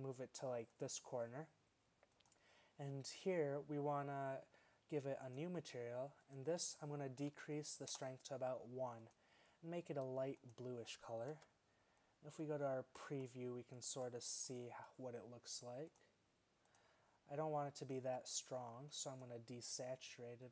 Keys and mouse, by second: 11.6 shift+z.